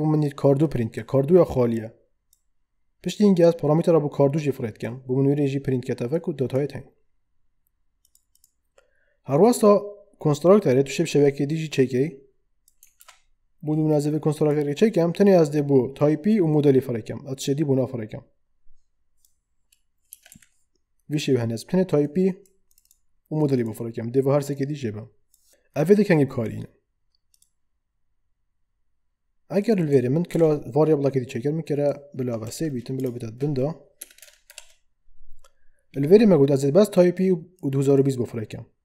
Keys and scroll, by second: 13.1 ctrl+d, 20.1 BackSpace, 20.3 Delete, 30.3 ctrl+d, 32.4 3, 33.0 space, 34.0 BackSpace, 34.5 alt+shift+Down.